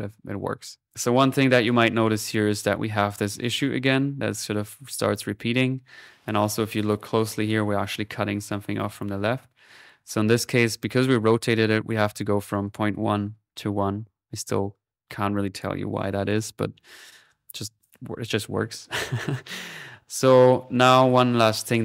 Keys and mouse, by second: 0.2 middle click, 0.8-2.8 drag, 0.8 p, 5.7 p, 6.2 middle click, 6.7 click, 8.8-10.0 drag, 11.0 middle click, 11.9 click, 12.4 click, 14.9 middle click, 15.3-17.1 drag, 16.3 p, 17.5-18.8 drag, 19.1 typing, 19.3-20.4 drag, 20.4 typing, 20.7 click.